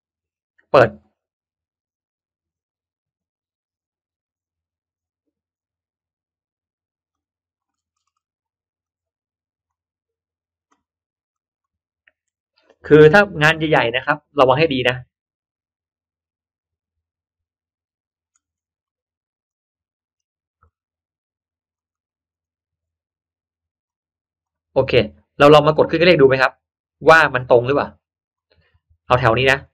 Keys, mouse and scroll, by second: 0.9 click, 7.0 click, 7.6-8.0 scroll down 1, 8.0 scroll up 1, 8.2 scroll down 1, 8.8-9.6 drag, 11.2 click, 19.4-20.6 drag, 21.7 click, 21.9 click, 24.4-25.4 drag, 26.0-28.2 drag, 29.5 click.